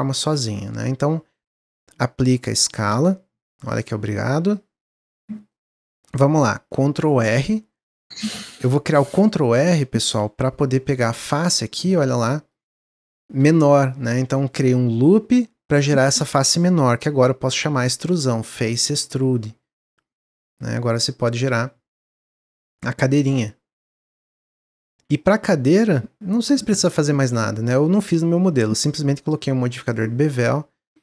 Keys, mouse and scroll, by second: 0.2 Tab, 0.5 Tab, 0.9 middle click, 1.4 Tab, 2.6-5.0 drag, 5.0 Tab, 5.4-6.8 middle drag, 6.8 ctrl+r, 10.1 3, 10.6 click, 11.0-14.5 shift+middle drag, 17.9 click, 18.9 e, 20.5 click, 21.5-24.8 middle drag, 24.8 2, 25.0 click, 25.7 click, 26.5 Tab, 28.5 click, 29.2 click, 29.9-30.5 drag, 30.9-31.0 drag.